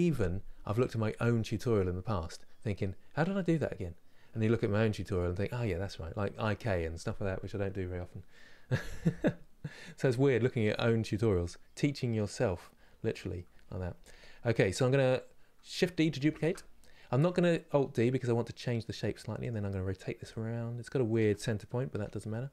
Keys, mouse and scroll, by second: 12.0 KP_1, 16.1 shift+d, 17.8 r.